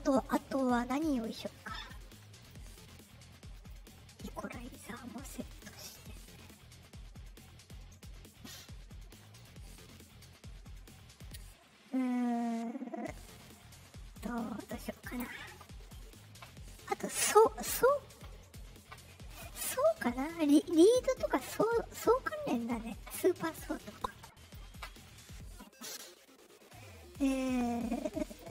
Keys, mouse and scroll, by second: 2.3 click, 3.5 drag, 4.5 click, 5.4 click, 6.3-7.3 drag, 9.2 click, 10.0 click, 16.9 click, 22.4 click, 24.0 click, 28.2 click.